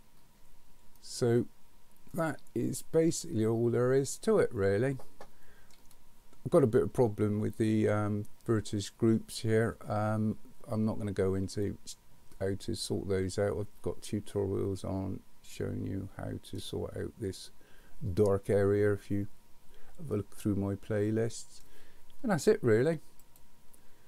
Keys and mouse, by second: 1.0-5.7 middle drag, 11.6-16.6 middle drag, 20.3-21.6 middle drag.